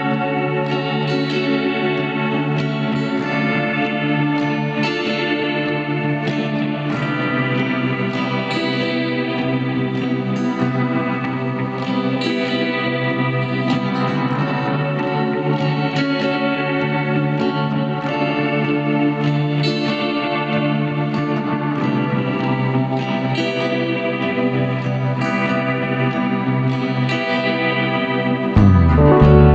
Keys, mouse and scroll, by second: 1.8 click, 3.1 scroll up 2, 5.0 shift+a, 5.5 s, 8.5-10.3 drag, 11.8 click, 12.8-13.7 drag, 13.7 scroll up 1, 14.9 click, 17.7 click, 18.2-21.0 drag, 22.6 click, 23.6 click, 24.6 drag, 25.8 click.